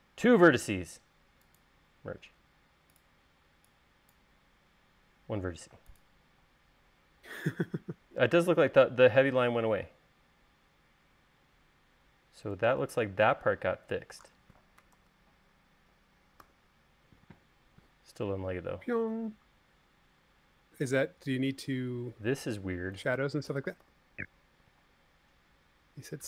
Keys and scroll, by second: 15.6 super+s, 17.1 u, 24.5 u.